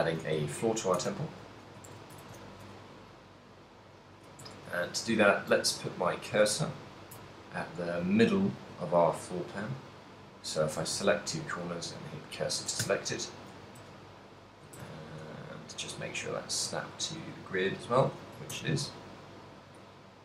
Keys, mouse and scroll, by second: 0.0-2.6 typing, 3.6 right click, 4.1 right click, 4.6 Tab, 5.0 a, 5.8 ctrl+click, 6.0 ctrl+click, 6.7 ctrl+click, 7.5 b, 9.4 b, 11.2 shift+s, 13.2 Tab, 14.1 a, 14.9 shift+s, 18.7 shift+a.